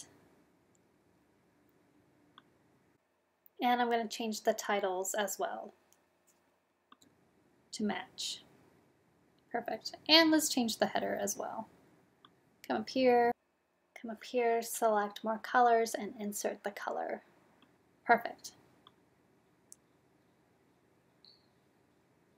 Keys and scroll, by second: 6.8 super+v, 15.2 super+v.